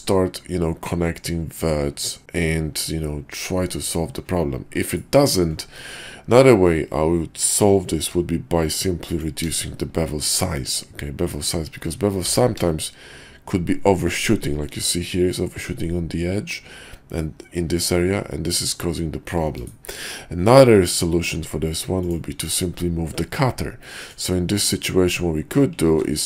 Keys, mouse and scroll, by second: 8.0 q, 20.8 click, 21.2 q, 23.8 drag, 25.9 ctrl+w.